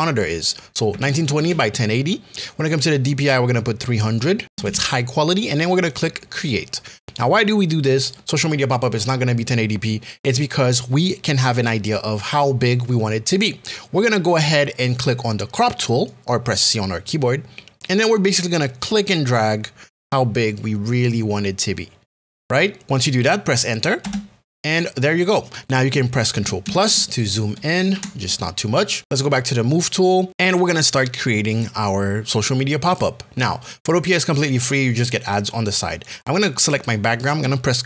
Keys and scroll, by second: 0.9 KP_1, 1.2 KP_0, 24.0 Return, 26.9 ctrl+KP_Add, 27.9 ctrl+KP_Subtract.